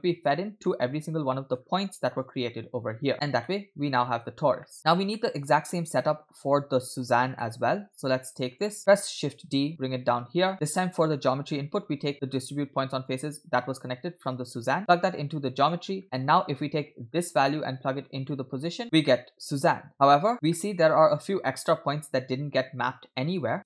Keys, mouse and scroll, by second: 0.6 middle click, 1.4 middle click, 1.6-2.0 scroll up 2, 2.3 click, 3.4-3.9 shift+middle drag, 4.3-4.8 scroll down 2, 4.6 middle click, 5.2 middle click, 5.7 scroll up 2, 6.0 middle click, 7.4 middle click, 8.3-8.7 drag, 8.8 middle click, 9.7 shift+d, 11.1 middle click, 13.1-15.8 drag, 16.0 middle click, 16.2-17.2 scroll down 2, 17.3-18.8 drag, 19.0 shift+middle click, 20.3 shift+middle drag, 20.6-20.9 scroll up 2.